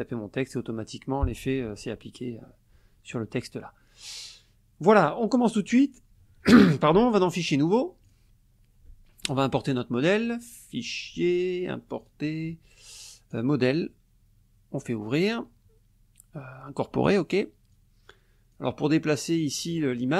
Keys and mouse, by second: 7.3 click, 8.0 click, 10.2 click, 10.9 click, 12.0 click, 13.3 click, 14.8 click, 17.1 click, 17.7 click, 19.1 click, 19.4 click.